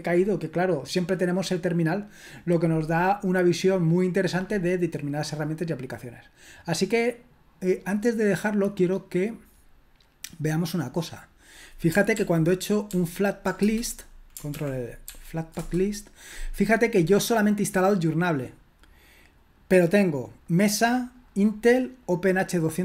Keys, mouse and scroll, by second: 11.4 click, 12.1 ctrl+p, 12.9 ctrl+p, 13.5 Return, 14.5 ctrl+l, 17.5-22.8 drag.